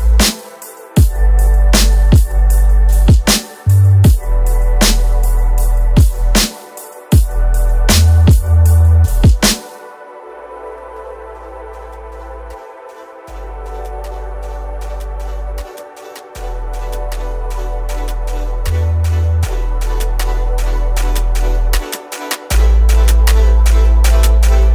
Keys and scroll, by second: 1.5 space, 2.2 space, 12.9 space, 18.1 space, 18.7 ctrl+space, 19.0 ctrl+KP_0, 21.3 alt+shift+j.